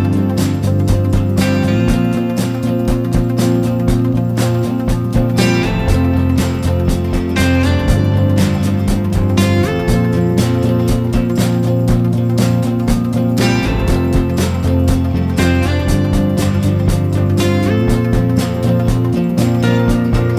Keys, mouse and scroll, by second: 4.6 click, 15.6 Right, 16.1 Right.